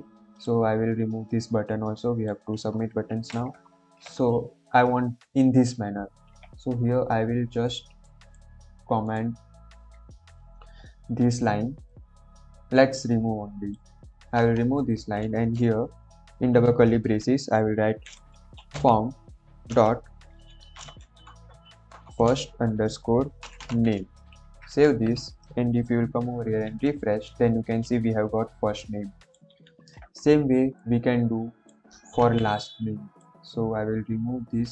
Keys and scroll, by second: 3.0 ctrl+s, 14.7 BackSpace, 15.8 shift+[, 18.0-19.1 typing, 20.7-24.1 typing, 24.2 ctrl+s, 32.1 ctrl+c.